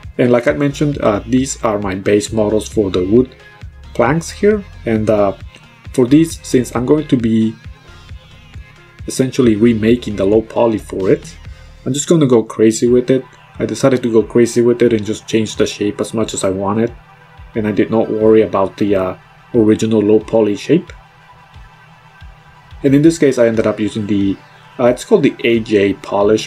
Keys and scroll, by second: 0.8 -.